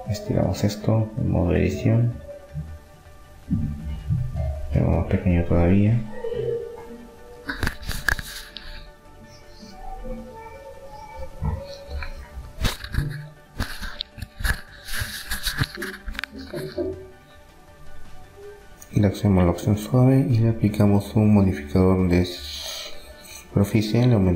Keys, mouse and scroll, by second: 1.8 Tab, 2.9 s, 6.1 Tab, 7.5-9.3 drag, 9.3 Tab, 10.5 Tab, 11.4-12.5 middle drag, 12.3 ctrl+r, 17.0 Tab, 19.2-22.3 drag.